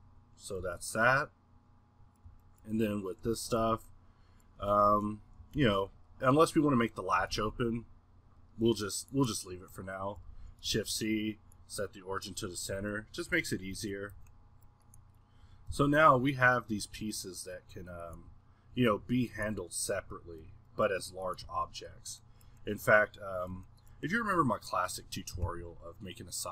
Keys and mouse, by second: 0.6 h, 1.6-3.6 middle drag, 3.6 a, 4.6-5.5 middle drag, 6.6-7.3 middle drag, 9.8-10.3 middle drag, 11.7-12.7 middle drag, 12.7 a, 14.1 a, 15.1 middle click, 15.4 r, 16.4 drag, 18.1 drag, 18.2 g, 19.1 middle click, 19.4 g, 20.4-21.4 middle drag, 21.4 g, 22.5-26.0 middle drag.